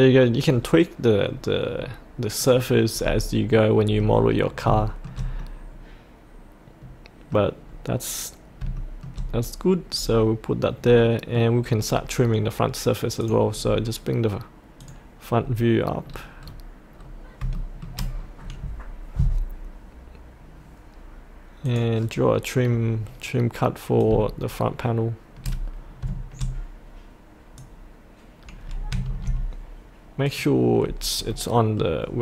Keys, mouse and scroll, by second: 1.4-2.4 scroll up 1, 2.4 click, 3.0-3.5 scroll up 1, 3.5 middle click, 4.3-4.6 scroll up 1, 4.8-7.4 shift+middle drag, 7.6-8.6 scroll down 1, 8.7 shift+middle click, 9.3-11.0 scroll up 1, 11.0 middle click, 11.8-13.2 scroll down 1, 13.2 click, 13.6-14.8 scroll down 1, 14.8 click, 16.0-17.4 scroll down 1, 17.5 shift+middle click, 18.1 scroll down 1, 21.6-27.7 drag, 28.6-28.9 scroll up 1, 30.2 click, 30.8-31.3 scroll up 1, 31.3 middle click, 32.1-32.2 scroll up 1.